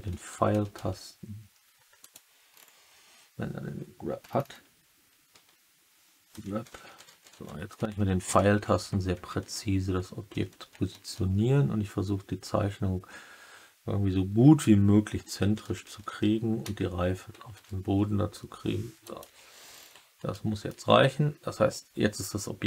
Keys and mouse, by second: 0.5 Left, 2.0 Left, 2.6-4.1 middle drag, 6.8 Right, 7.0 Right, 7.3 Right, 7.7 Left, 7.9 Left, 8.3 Left, 8.3 Right, 8.6 Right, 10.2 Left, 10.4 Left, 15.3 Up, 15.6 Up, 15.8 Up, 16.0 Up, 16.6 Down, 17.5 Up, 19.0 click, 20.3-20.7 middle drag.